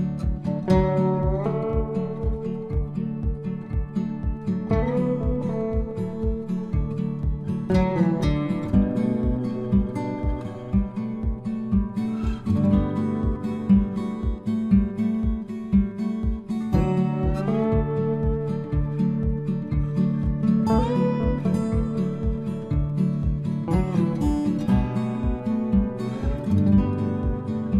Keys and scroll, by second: 19.3 ctrl+z.